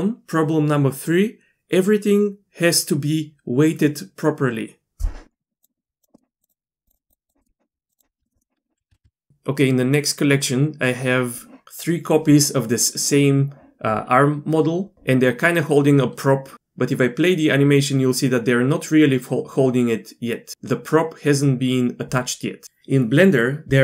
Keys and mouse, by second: 5.6-6.8 drag, 7.3 click, 7.4-7.9 middle drag, 8.9 Tab, 9.0 q, 17.0-22.6 drag.